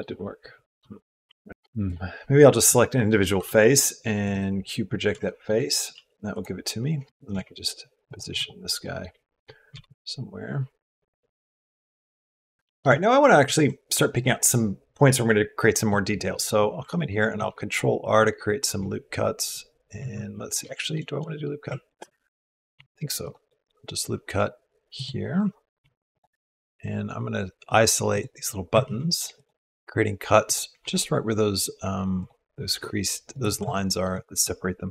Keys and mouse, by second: 1.1 u, 3.1 u, 5.0 shift+middle click, 5.7 s, 7.2 g, 8.6 shift+click, 9.5 g, 12.5 shift+middle click, 13.2 ctrl+middle click, 17.1 ctrl+r, 20.5 shift+click, 20.6 shift+middle click, 21.0 middle click, 22.5 ctrl+r, 28.9 ctrl+r, 29.6 ctrl+r, 30.6 ctrl+r, 33.5-34.9 shift+drag, 34.7 ctrl+r.